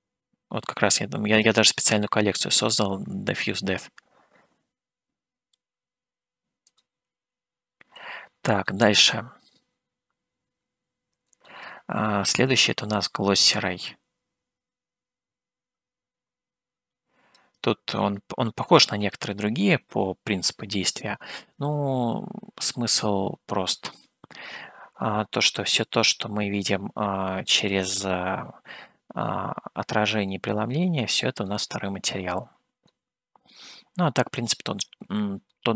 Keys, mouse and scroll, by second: 1.4 click, 6.9 click, 9.2-11.7 middle drag, 14.1-18.0 drag, 20.2 scroll down 1, 23.2-28.3 middle drag, 30.4-31.7 middle drag, 33.0-35.6 middle drag.